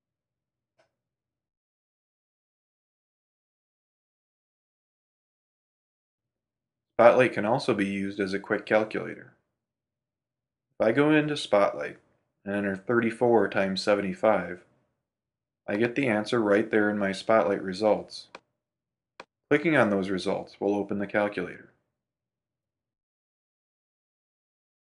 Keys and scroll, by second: 5.7 super+w, 7.1 super+space, 9.5 super+space, 21.3 super+space.